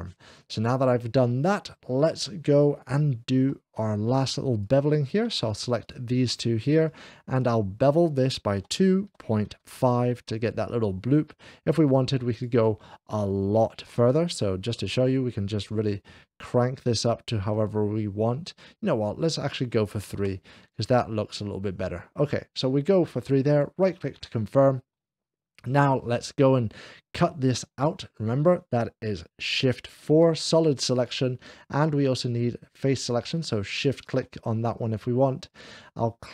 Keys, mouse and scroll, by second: 0.3 scroll up 1, 3.4 4, 3.5 q, 3.5 2, 4.4 click, 4.8 scroll up 1, 5.7-7.6 shift+drag, 8.6 2, 9.6 click, 10.1 click, 14.7-20.5 drag, 23.3-24.4 right drag, 23.6 click, 24.4-25.6 middle drag, 29.9 click, 29.9 shift+4, 30.8 click, 33.6 shift+click, 35.3 click.